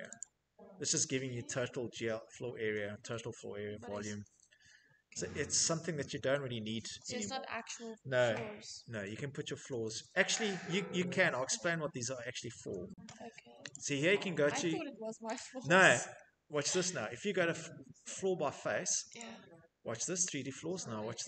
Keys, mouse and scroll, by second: 3.9 Escape, 4.4 Escape, 9.3 Escape, 13.2 click, 14.8 click, 18.6 click.